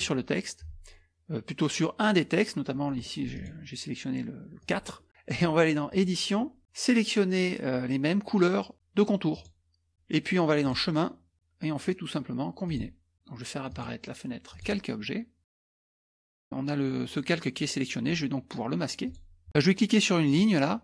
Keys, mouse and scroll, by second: 2.9 middle click, 3.3 click, 4.6 click, 5.9 click, 9.3 click, 10.6 click, 12.7 click, 13.7 click, 14.5 click, 19.0 click, 19.5 scroll down 1, 20.3 click.